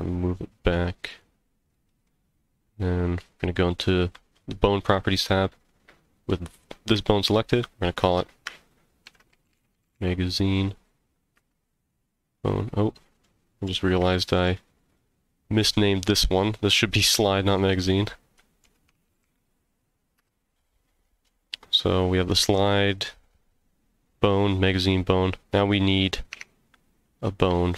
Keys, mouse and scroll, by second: 1.1 click, 1.7 middle click, 4.7 click, 7.4-12.0 drag, 13.2 middle click, 14.1 shift+middle click, 14.9 click, 17.7-20.7 drag, 21.2 middle click, 25.1 scroll down 1, 26.3 Tab, 27.5 z.